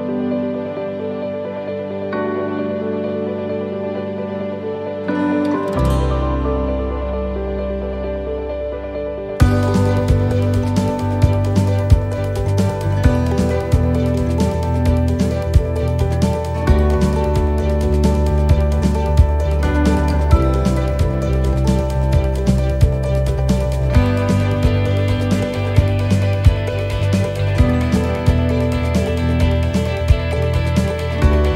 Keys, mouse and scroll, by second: 2.5 middle click, 3.0 scroll down 1, 3.7 middle click, 3.7 scroll down 2, 4.2 right click, 5.2 shift+d, 6.7 g, 9.6 y, 11.2 g, 16.7 click, 18.3 a, 19.3 r, 22.0 middle click, 26.0 click, 27.2 middle click, 28.0-29.0 scroll up 3, 28.5 middle click, 29.0 scroll down 1, 29.4 middle click, 30.2 middle click, 30.4-31.0 scroll down 1, 31.0 middle click.